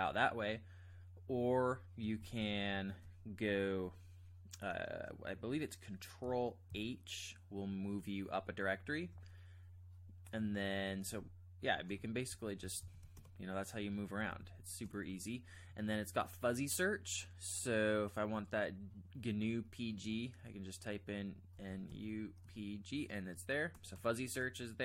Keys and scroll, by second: 2.2 ctrl+j, 2.4 ctrl+j, 2.6 ctrl+j, 6.7 ctrl+h, 11.1 k, 12.6 ctrl+j, 12.8 ctrl+j, 13.2 Return, 14.2 j, 14.4 j, 21.6-22.4 typing, 23.7 typing.